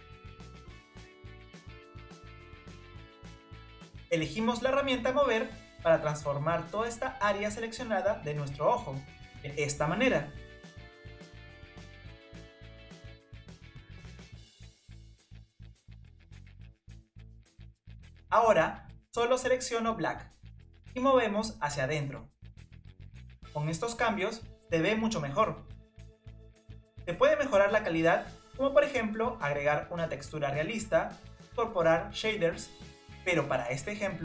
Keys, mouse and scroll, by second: 0.6 ctrl+click, 0.8 shift+click, 1.2 shift+click, 1.9 shift+click, 2.4 shift+click, 2.8 shift+click, 4.5 scroll down 1, 4.9-7.9 middle drag, 9.7 click, 10.4 click, 11.5-13.0 middle drag, 14.6-16.0 middle drag, 16.0-16.4 drag, 16.6 click, 17.5 click, 18.9-20.5 drag, 23.9-26.9 middle drag, 28.9-29.4 scroll down 2, 30.4-31.0 scroll up 1, 31.0 click, 31.7-34.2 middle drag.